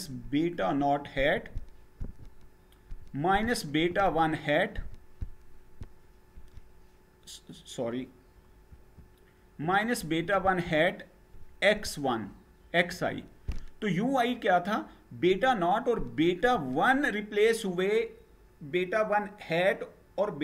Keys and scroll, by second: 8.3 Up.